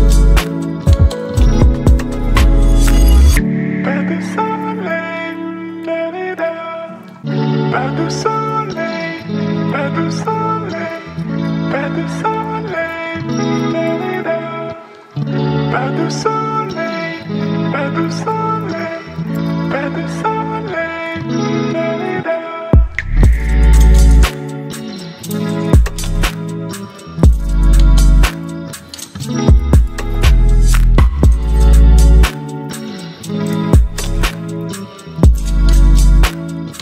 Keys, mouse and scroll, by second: 0.5 ctrl+v, 1.0 Return, 2.9 click, 3.5-5.8 scroll down 1, 7.6 scroll up 1, 8.6 click, 10.1 ctrl+0, 12.2 click, 12.6 right click, 13.3 click, 16.1 click, 18.3 click, 22.8-24.6 scroll up 1, 25.9 click, 26.5-27.2 scroll down 1, 29.5 click.